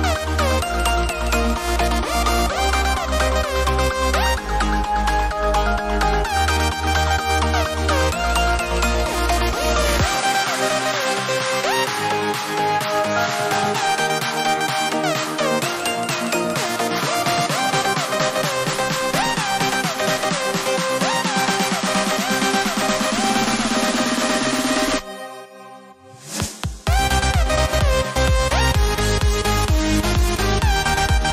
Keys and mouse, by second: 4.7 KP_Enter, 8.5 ctrl+Num_Lock, 8.7 ctrl+space, 9.1 ctrl+click, 9.2 ctrl+space, 13.3 click, 19.9 click, 26.9 click.